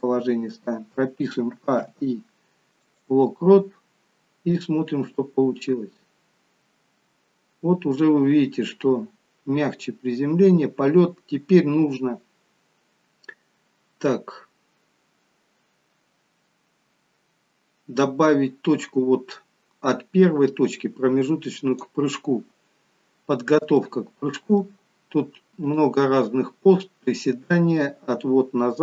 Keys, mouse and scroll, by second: 1.5 a, 1.9 i, 4.6 click, 23.2-23.8 scroll up 2, 23.8 shift+middle click, 25.5 click.